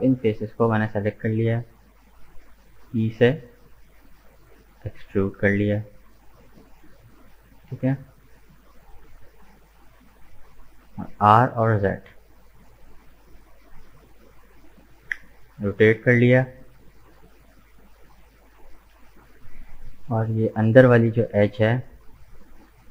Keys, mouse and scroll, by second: 0.3 KP_1, 2.7 e, 8.0 middle click, 8.7-9.1 scroll down 2, 9.1-11.1 middle drag, 11.1 r, 15.0-16.6 middle drag, 16.6 right click, 17.5 right click, 18.8-19.8 drag, 19.8 right click, 20.5 shift+right click, 21.2 shift+right click, 21.7 shift+right click, 22.1 middle click.